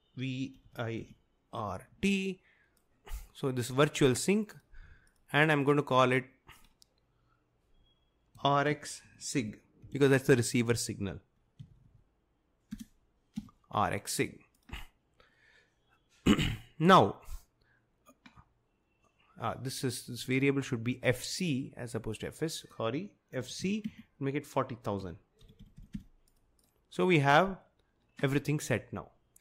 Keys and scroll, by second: 0.6-1.9 typing, 8.2-10.3 typing, 11.7 Left, 11.8 Left, 11.9 Left, 12.7-13.4 typing, 23.2-27.3 typing.